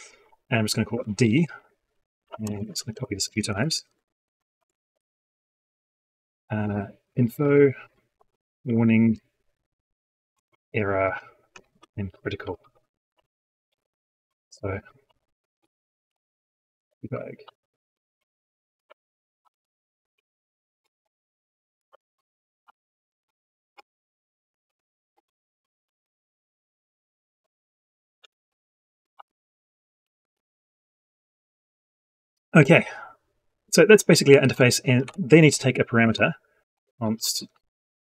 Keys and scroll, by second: 2.6 ctrl+c, 3.4 ctrl+v.